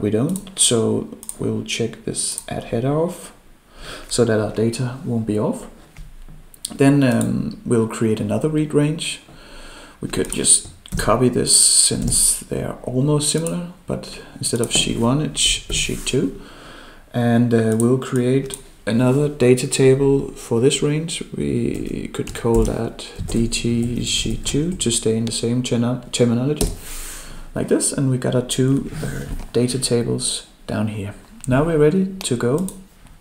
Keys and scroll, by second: 10.9 ctrl+c, 12.0 ctrl+v, 22.5 ctrl+k.